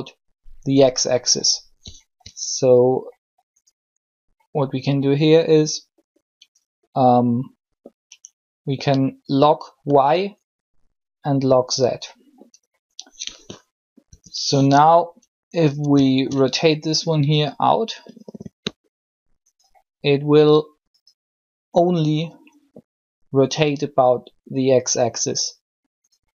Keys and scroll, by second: 13.9 n.